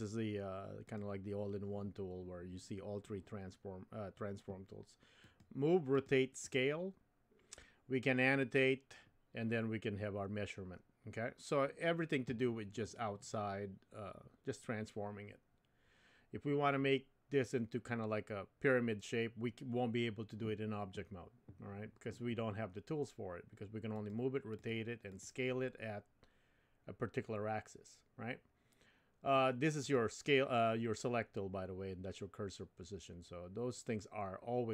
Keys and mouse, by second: 0.9 click, 5.2 click, 6.0 click, 6.4 click, 24.0 click, 25.2 click, 29.9 click.